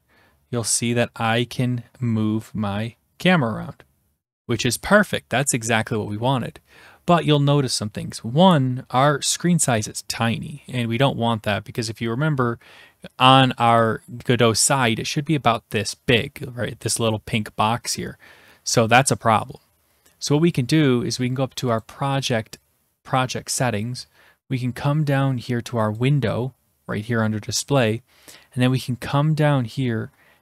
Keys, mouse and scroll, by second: 0.1 click, 2.6 click, 21.8 click, 23.2 click, 24.4-25.5 scroll, 26.0-27.0 drag, 28.7-30.4 scroll down 6.